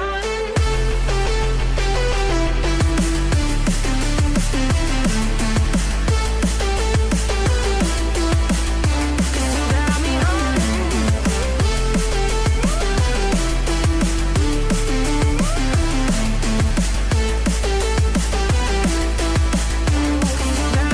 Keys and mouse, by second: 5.5 r, 7.9 r, 9.2 ctrl+z, 9.4 ctrl+z, 9.7 ctrl+z, 10.4 r, 12.1 r, 14.1 click, 14.5 KP_2, 15.5 KP_3, 16.2 g, 17.3 r, 18.0 r.